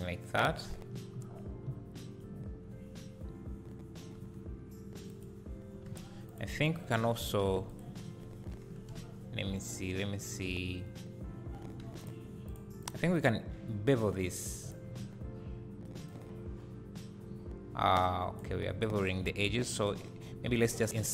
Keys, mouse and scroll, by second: 1.1 scroll up 1, 4.2 3, 5.1 click, 5.9 alt+a, 6.3 click, 7.7 alt+shift+click, 12.0 shift+click, 12.8 shift+click, 13.1 shift+click, 14.6-16.1 drag, 15.1-16.1 scroll up 2, 18.9 ctrl+z, 20.9 click.